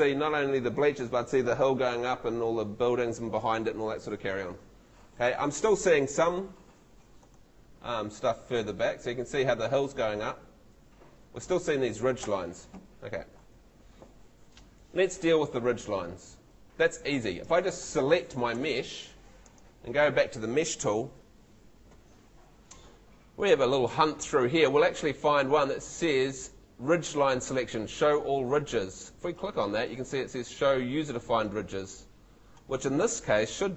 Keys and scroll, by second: 12.2 Escape.